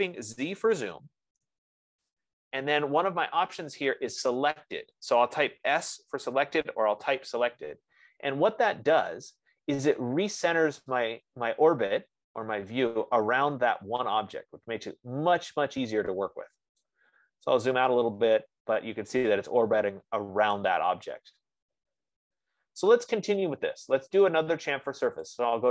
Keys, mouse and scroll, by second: 1.2 z, 1.7 Return, 6.5 s, 6.8 Return, 17.1 right click, 17.7 scroll, 20.2 scroll, 21.0 right click, 21.6 F15, 22.3 middle click, 22.5 middle click, 25.1-25.7 scroll.